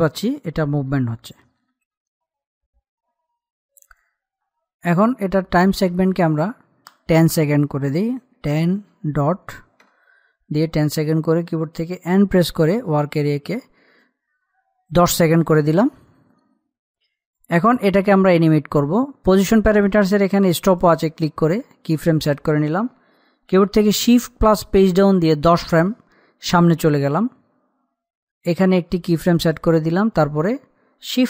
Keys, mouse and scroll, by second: 2.1 ctrl+z, 6.6 click, 13.1 n, 14.4 right click, 16.0-21.2 drag, 24.8 shift+Num_Lock, 25.3 shift+Page_Down, 30.0 click.